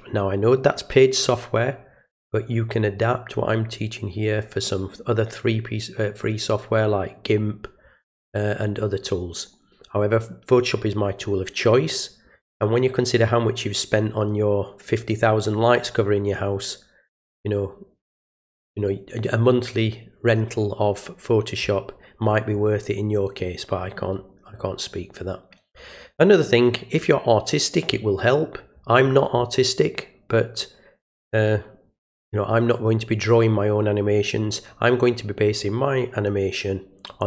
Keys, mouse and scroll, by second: 37.1 click.